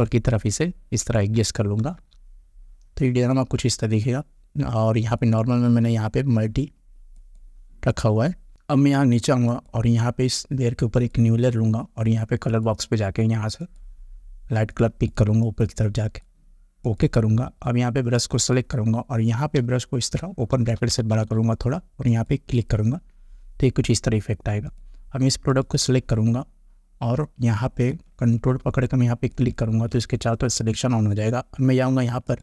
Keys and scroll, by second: 1.9 Return, 19.6 ].